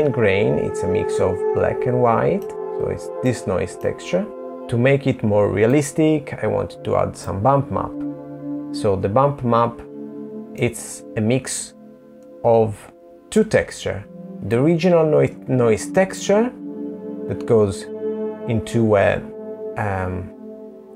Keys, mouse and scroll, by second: 1.2 middle click, 2.6 middle click, 4.5 click, 8.5 middle click, 10.3 middle click, 12.5 click, 19.3 click.